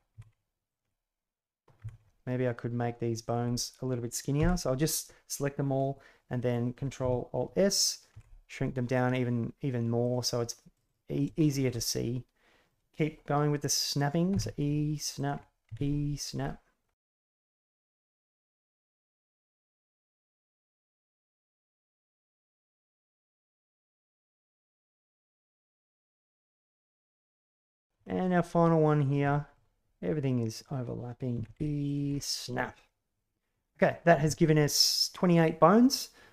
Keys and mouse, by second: 0.1 e, 1.7 e, 3.5 right click, 4.3 l, 8.1 ctrl+alt+s, 10.7 right click, 11.4 shift+middle drag, 11.8-12.6 middle drag, 14.3 e, 15.6 e, 16.4-16.8 middle drag, 17.2 e, 17.9 ctrl+e, 18.1 drag, 19.0 ctrl+e, 20.9 ctrl+e, 21.3 ctrl+e, 21.8 g, 22.6 e, 23.0 e, 23.8 e, 25.6 e, 26.3 e, 26.9 ctrl+e, 27.7 click, 28.0 shift+middle click, 28.4 middle click, 29.3 shift+middle click, 32.7-33.8 middle drag.